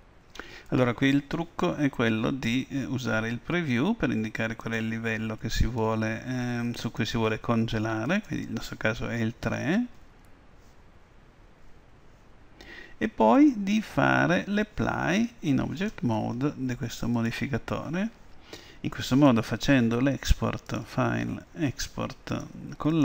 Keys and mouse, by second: 4.7-15.1 drag, 17.2-19.1 drag, 20.7-22.6 drag.